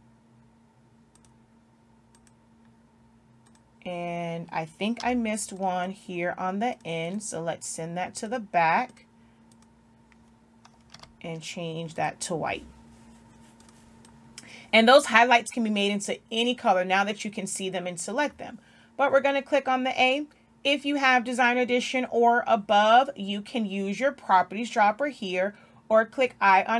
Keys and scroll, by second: 5.5 z, 11.4 i.